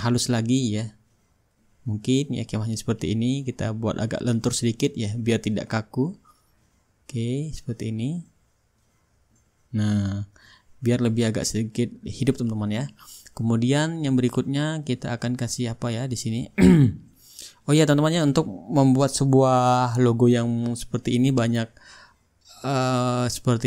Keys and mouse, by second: 4.7 click, 5.7-9.5 drag, 9.7-13.4 drag, 15.6-16.6 drag, 17.6-23.6 drag.